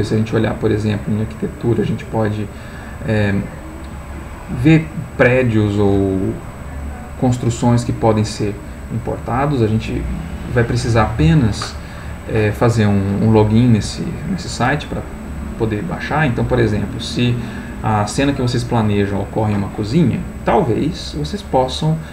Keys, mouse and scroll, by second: 0.3 click, 6.7 scroll down 1, 7.5-8.2 scroll down 1, 8.8-9.5 scroll down 1, 10.0 scroll down 1, 16.6 click.